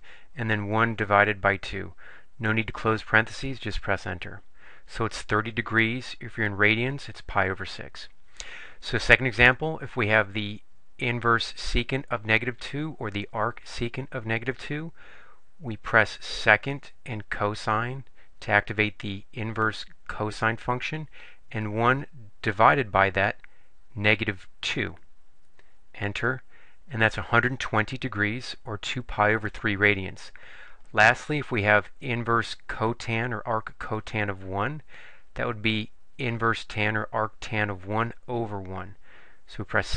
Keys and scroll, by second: 0.3 1, 1.9 2, 3.6 Return, 21.8 1, 24.7 2, 25.7 Return.